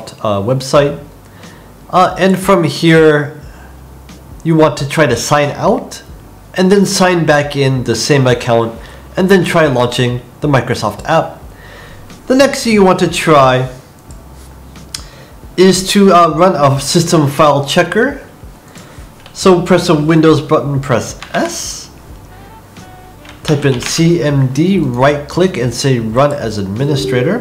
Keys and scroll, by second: 21.1 super+s.